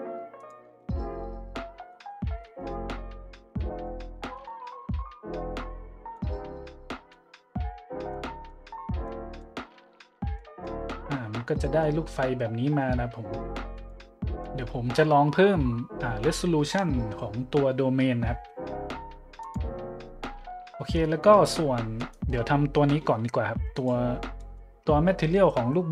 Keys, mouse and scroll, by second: 0.3 click, 0.8 shift+z, 1.0 middle drag, 1.6 middle click, 1.9-2.3 middle drag, 2.4-2.9 shift+middle drag, 3.6-3.9 drag, 4.3 click, 6.1-7.1 middle drag, 8.1-8.5 drag, 9.1-9.4 drag, 10.3-10.7 drag, 11.6 middle click, 13.7-14.1 drag, 14.2 middle click, 19.4-19.8 drag, 21.9 middle click, 23.0 middle drag, 23.7 click, 24.4-24.7 middle drag.